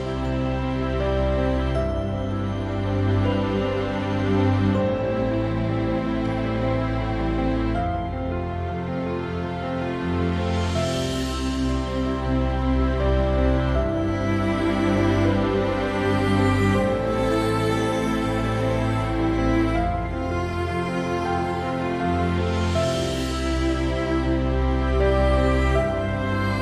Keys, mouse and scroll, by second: 0.5-3.2 drag, 3.2 middle click, 3.7 click, 3.7 right click, 8.0-9.5 drag, 8.0-26.6 right drag, 16.6-26.6 drag.